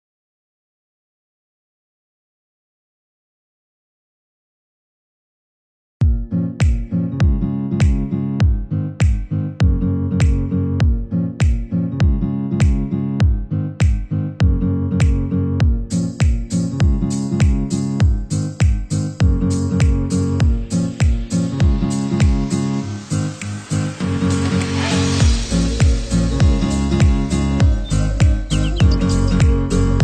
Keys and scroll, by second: 20.7 ctrl+=, 23.8 Delete, 24.6 Delete, 25.2 ctrl+z, 27.1 ctrl+=, 27.8 Delete, 28.3 ctrl+z.